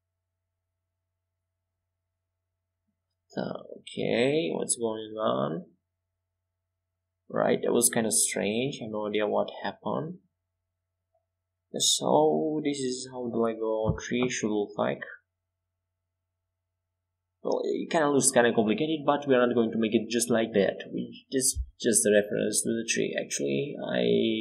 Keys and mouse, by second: 4.1 x, 5.5 s, 7.3-8.4 drag, 9.7 KP_5, 10.8 KP_7, 14.0-15.7 drag, 14.8 shift+a, 22.1 s.